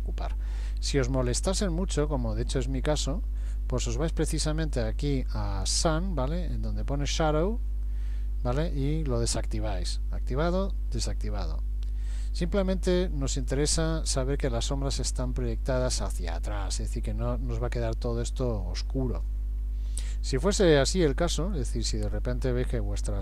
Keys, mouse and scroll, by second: 2.1 middle click, 4.7 click, 8.5 click, 10.5 click, 13.4 click, 22.4-23.2 scroll down 9.